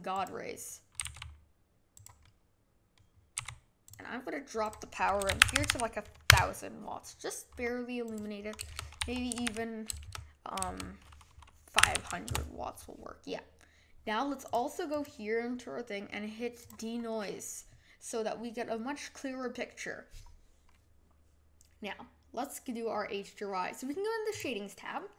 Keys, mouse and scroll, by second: 1.0 g, 2.2-3.3 middle drag, 3.3 g, 4.6 click, 5.6 KP_0, 5.7 KP_0, 8.2-9.4 drag, 9.4 KP_0, 14.5-15.0 drag, 16.6 click.